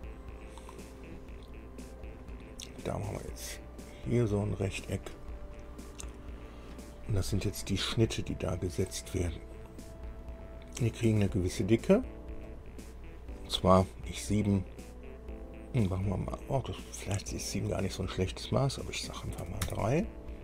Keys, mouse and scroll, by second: 0.6 scroll down 2, 2.2 click, 4.0 click, 5.1 click, 5.7 scroll up 1, 6.4 scroll up 1, 8.8 right click, 11.1 click, 12.7 click, 19.7 KP_3, 19.9 KP_Enter.